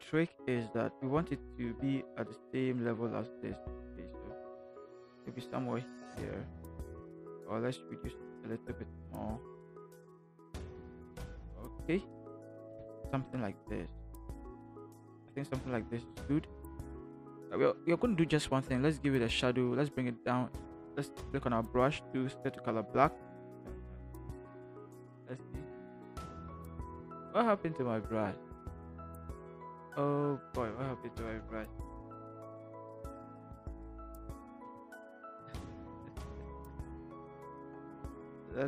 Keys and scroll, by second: 0.3 v, 7.1 ctrl+t, 12.7 shift+Return, 21.5 b, 23.6 ctrl+alt+z, 31.1 ctrl+t, 34.6 Return, 35.1 v.